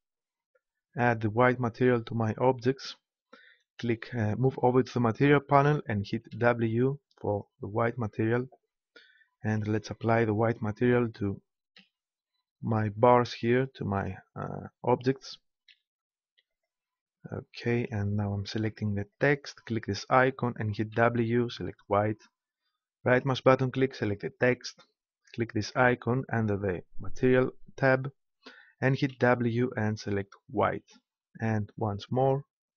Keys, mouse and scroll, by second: 2.1-4.0 drag, 9.5-10.9 right drag, 10.9 click, 11.3-12.6 right drag, 13.9-15.0 right drag, 15.0-16.6 drag, 16.6 right click, 17.8-19.0 right drag, 23.1-24.8 right drag, 31.8-32.7 right drag.